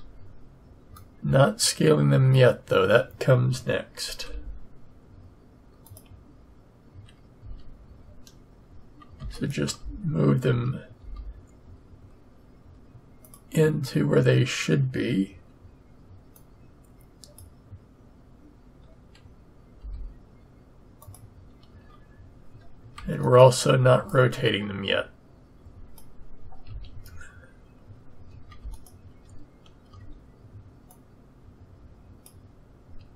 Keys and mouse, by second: 1.0-2.3 middle drag, 2.3 click, 4.2 g, 7.4 a, 10.9-12.6 drag, 16.3-18.2 drag, 19.8 g, 21.7 a, 23.3 click, 25.3 click, 26.7 a, 30.2-32.6 drag.